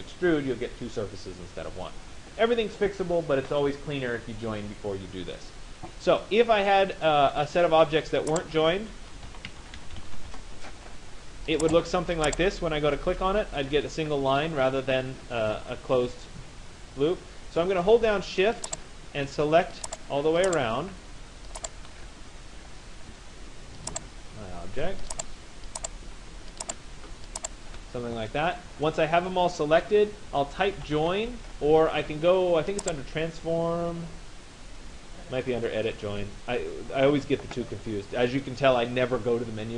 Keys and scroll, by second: 9.9 Return.